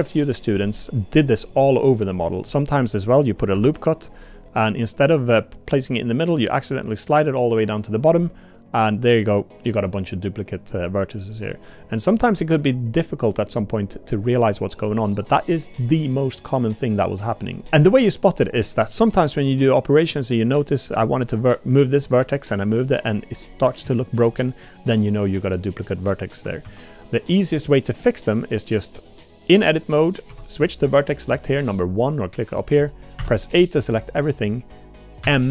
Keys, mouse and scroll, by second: 1.6 middle click, 2.6 middle click, 3.5 ctrl+r, 11.5 middle click, 12.2 middle click, 20.1 1, 20.5 click, 22.0 g, 24.0 shift+click, 24.4 click, 26.6 ctrl+z, 28.0 click, 30.3 1, 33.2 a, 35.2 m.